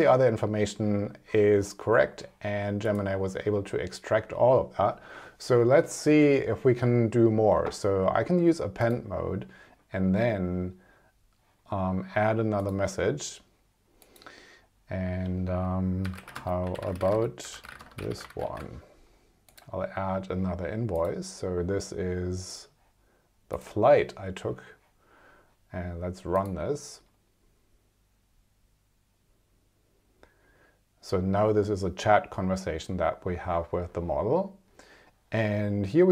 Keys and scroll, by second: 16.3-18.9 typing.